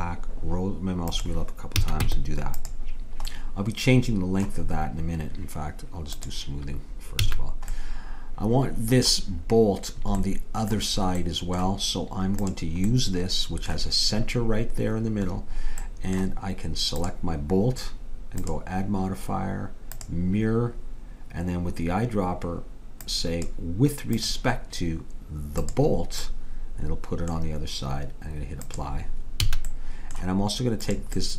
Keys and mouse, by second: 1.9 a, 2.1 Tab, 3.4-5.7 middle drag, 6.2-8.0 drag, 7.2 a, 8.0 middle click, 12.4-14.3 drag, 17.0-20.3 drag, 23.1-26.1 drag, 26.3-28.7 middle drag, 28.7-30.5 drag, 29.5 a, 30.9-31.3 drag.